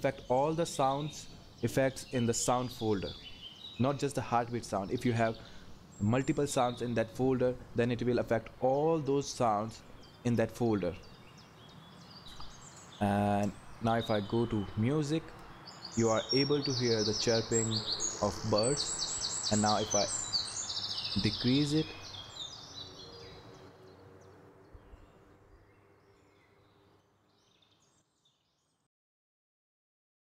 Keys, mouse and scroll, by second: 0.0-30.3 drag.